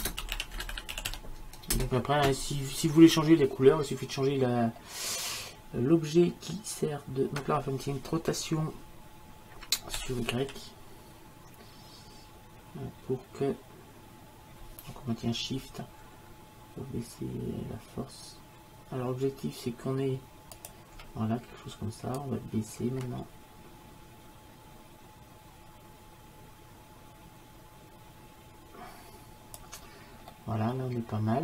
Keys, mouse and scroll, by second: 0.7 n, 10.0 r, 22.2-24.1 drag, 30.4 middle click.